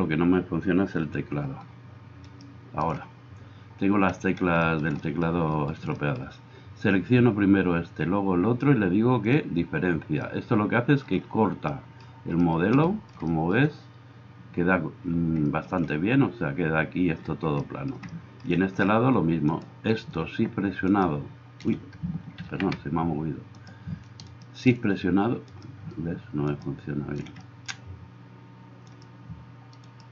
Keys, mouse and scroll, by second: 0.0-1.1 middle drag, 1.1-2.2 shift+drag, 2.2 shift+middle click, 2.6-30.1 shift+drag, 21.0-23.8 middle drag, 21.0-23.8 right drag, 22.5 ctrl+z, 24.3 middle click, 24.3 right click, 25.6-26.6 middle drag, 25.6-26.6 right drag, 28.9-30.1 right drag, 29.9 middle click.